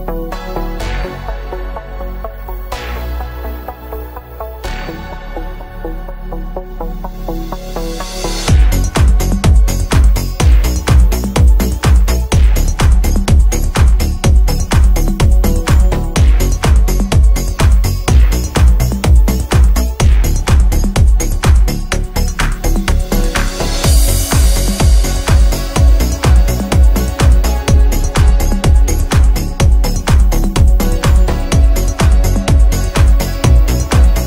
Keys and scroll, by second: 1.2 Delete, 13.9 g, 22.8 F3, 23.2 Escape.